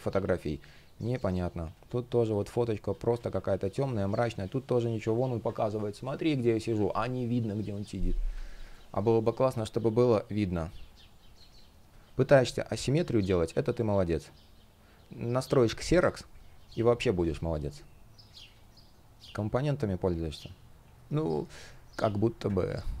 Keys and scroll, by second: 2.8 super+z, 5.1 super+z, 8.3 space, 12.9 space, 18.2 shift+o, 22.3 super+z, 22.9 space.